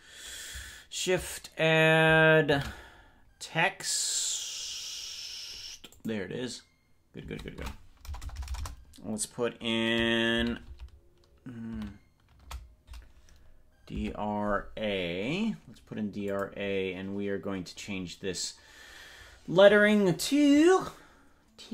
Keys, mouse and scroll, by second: 2.5 shift+a, 7.6 Tab, 8.2-8.6 BackSpace, 10.4 shift+d, 10.8 shift+r, 11.8 shift+a, 14.0 Tab, 16.3 click.